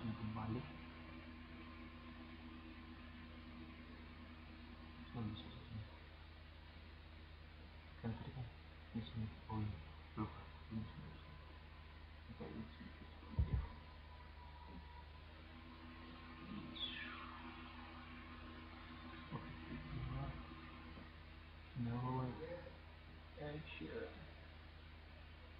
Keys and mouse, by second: 3.8-4.5 drag, 8.1 click, 11.4 right drag, 15.5-17.4 drag, 20.7 click, 21.1 click, 23.8 click.